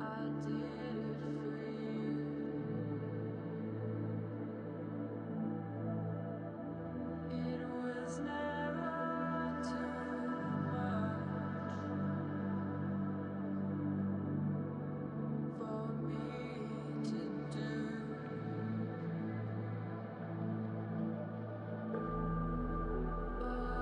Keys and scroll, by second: 2.1 space, 6.4 space, 9.6 space, 11.5 space.